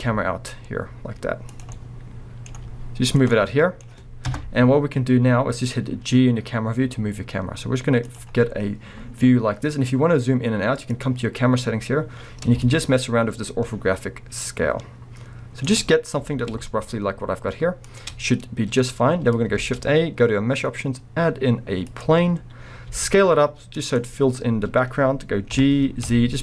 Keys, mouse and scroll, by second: 0.0 g, 1.6 click, 1.7 middle click, 2.5 g, 3.1 drag, 3.3-4.3 middle drag, 4.9 middle click, 4.9 scroll up 1, 5.2 g, 8.1 click, 8.2-10.3 middle drag, 8.2 scroll up 1, 9.1-10.3 scroll down 1, 11.0 click, 12.6-18.0 shift+drag, 16.2 g, 18.1-19.6 scroll, 22.6-22.9 scroll, 22.9 s, 24.0 click, 24.7 scroll, 24.8-25.5 scroll up 1, 25.5 g.